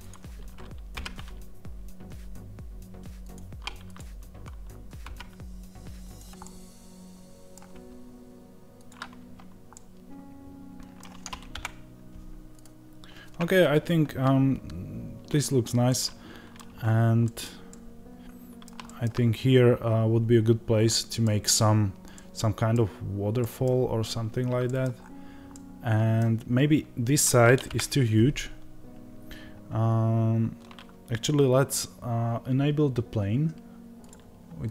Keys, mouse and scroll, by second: 0.0 click, 0.8 g, 3.8 click, 4.9 g, 6.3-12.5 middle drag, 7.6 g, 11.4 KP_0, 12.5 click, 15.7-33.9 middle drag, 16.6-17.1 scroll up 1, 17.5 scroll up 1, 19.1 scroll up 1, 24.8-25.4 scroll down 1, 27.6 KP_0, 33.9-34.7 drag.